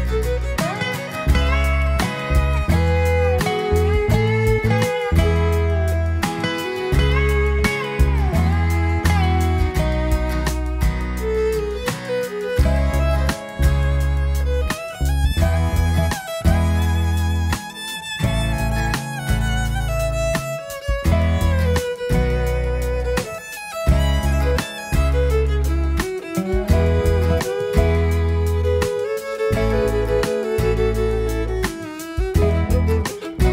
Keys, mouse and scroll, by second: 0.5 click, 1.0 click, 2.1 shift+d, 3.0 y, 4.7 click, 7.3 click, 8.2-10.4 drag, 11.1-11.6 scroll up 3, 11.6-12.7 middle drag, 14.4-20.4 drag, 20.7-21.6 middle drag, 20.7-21.0 scroll up 1, 22.0-22.6 scroll up 3, 22.6-23.1 scroll down 2, 23.1-23.8 middle drag, 23.8 scroll up 1, 24.2 click, 25.2 shift+d, 26.7 x, 27.6 click, 30.3 click, 30.7 click, 31.5-32.4 middle drag, 32.7 click.